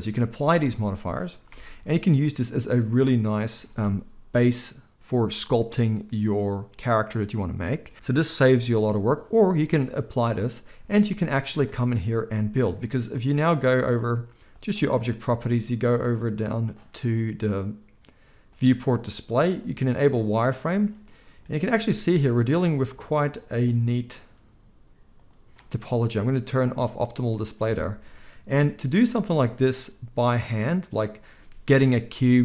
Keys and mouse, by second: 1.4 n, 14.5 click, 14.6-18.5 middle drag, 18.5-20.3 drag, 20.3-22.2 middle drag, 22.2 click, 24.2-25.2 drag, 27.6 alt+a, 28.4 KP_1.